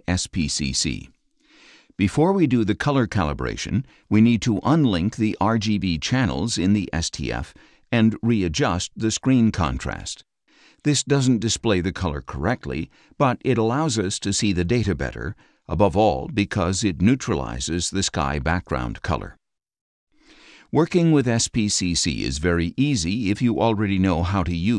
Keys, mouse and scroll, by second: 3.4 click, 6.7 click, 9.9 click, 19.0 click, 21.8 click.